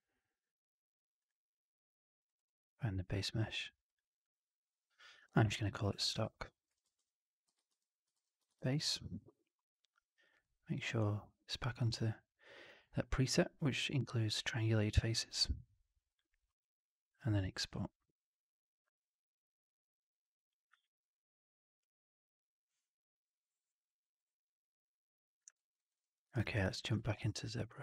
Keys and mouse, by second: 25.5 alt+drag, 25.7 alt+right drag, 25.9 alt+click, 26.1 alt+middle drag, 26.2 alt+right drag, 26.5 alt+drag.